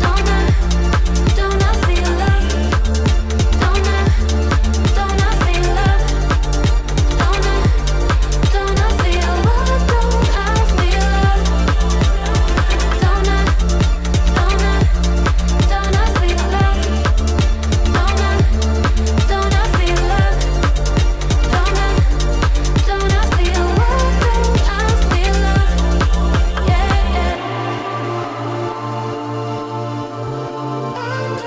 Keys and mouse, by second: 1.0 alt+click, 1.5 s, 4.0 s, 8.4 click, 9.2 alt+click, 10.5-11.6 drag, 12.1 alt+click, 12.5 s, 14.7 click, 16.1 alt+click, 16.7-18.2 drag, 20.3 alt+click, 21.1-22.4 drag, 22.9 alt+click, 23.6 click, 24.8 s, 26.2 alt+click, 27.5 click, 28.2 s, 30.3 click.